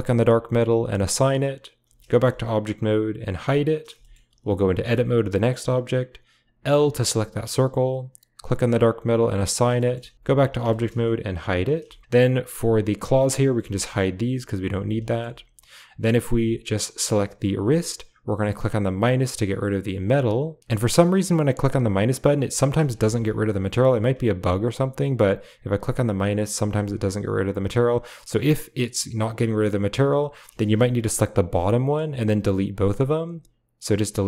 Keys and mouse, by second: 1.7 Tab, 2.1 middle click, 3.3 h, 4.0 shift+middle click, 4.2 click, 4.8 Tab, 6.6 l, 8.3-9.3 drag, 9.8 click, 10.1 Tab, 10.7 shift+click, 11.3 h, 11.8 shift+click, 12.6 click, 13.4 h, 14.2 click, 14.6 h, 15.0 shift+click, 15.9 click, 19.0 click, 19.0 typing, 19.9 click, 20.5 click, 20.6 ctrl+z, 21.4 click, 23.9 typing, 25.5 click, 30.4 ctrl+z, 33.2 click, 34.1 typing.